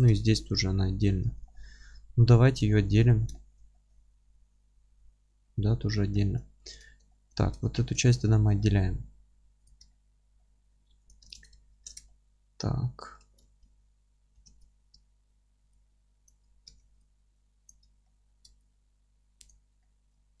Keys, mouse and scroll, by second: 0.2-2.7 alt+middle drag, 0.5 scroll up 2, 1.3 alt+q, 3.1-6.7 alt+middle drag, 4.2-5.4 scroll up 2, 5.4 scroll down 2, 5.9 scroll up 2, 6.7 click, 6.9 alt+q, 7.1-9.7 alt+middle drag, 7.4 Tab, 7.7 scroll up 1, 8.3-8.6 scroll down 1, 8.8-9.3 scroll up 1, 9.3 3, 9.7 click, 9.9-11.1 alt+middle drag, 11.1 click, 12.1-16.3 alt+middle drag, 13.6 ctrl+KP_Add, 16.3-18.1 alt+drag, 16.8 alt+z, 18.1-19.5 middle drag, 18.2-19.5 scroll down 2, 19.5 alt+click, 19.8-20.4 alt+middle drag, 20.1-20.4 scroll up 2.